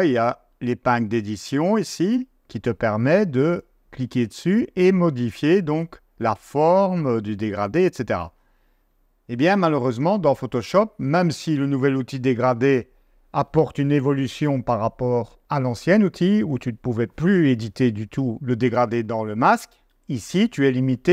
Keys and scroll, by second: 8.9 super+Tab.